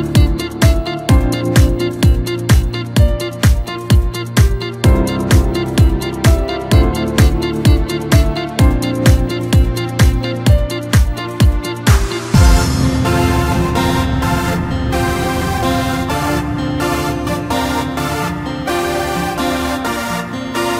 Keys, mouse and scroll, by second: 1.4-1.8 drag, 2.3 click, 3.7 click, 8.9 click, 10.0-10.3 drag, 11.0 click, 17.1-19.6 drag, 19.6-20.7 scroll up 1.